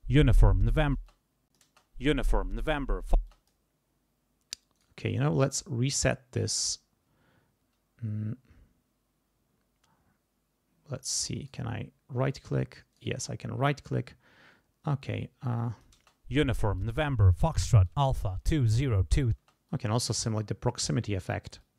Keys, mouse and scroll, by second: 1.0 space, 1.1 click, 1.6 space, 3.2 space, 3.3 click, 4.7 right click, 11.4 right click, 12.2 right click, 12.9 right click, 15.0 click, 15.9 space, 16.8 click, 17.8 click, 19.3 space, 19.7 click, 20.9 click, 21.6 click.